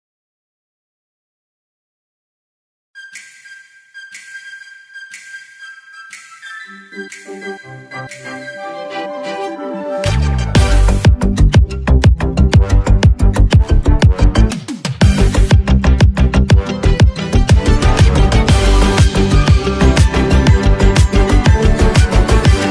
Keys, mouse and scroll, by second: 7.6-8.6 drag, 8.7 alt+scroll down 1, 9.1-9.4 scroll up 1, 10.2-10.5 alt+scroll up 1, 10.8 ctrl+s, 13.5 click, 19.1-22.7 drag.